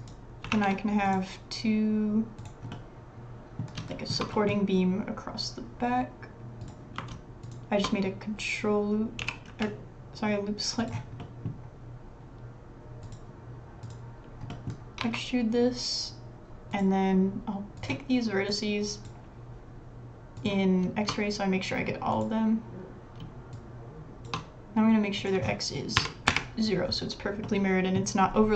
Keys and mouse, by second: 0.0 click, 0.5 ctrl+r, 2.7 middle click, 3.5 middle click, 3.9 shift+middle click, 4.3 middle click, 6.6 click, 9.2 g, 10.4 click, 11.2 click, 14.5 middle click, 15.0 e, 20.4 click, 23.5 shift+click, 25.3-26.9 middle drag, 27.3 b, 27.4 middle click.